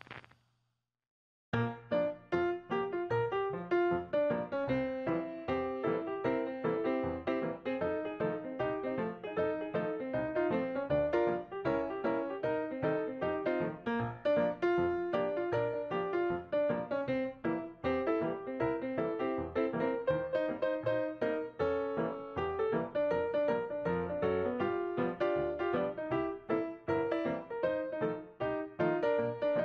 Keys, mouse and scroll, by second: 6.8 ctrl+scroll down 1, 8.5 shift+click, 13.0 ctrl+g, 13.8 shift+click, 19.8 shift+click, 22.1 right click, 27.6 shift+click.